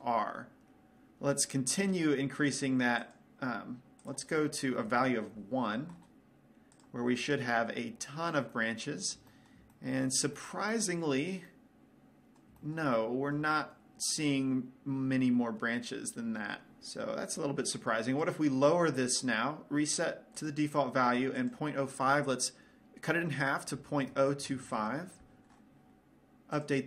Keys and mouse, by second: 0.0 middle click, 0.6 middle click, 8.1-11.5 middle drag, 11.8-14.8 middle drag, 18.3-20.2 drag, 20.2-21.5 middle drag, 21.9-23.8 drag.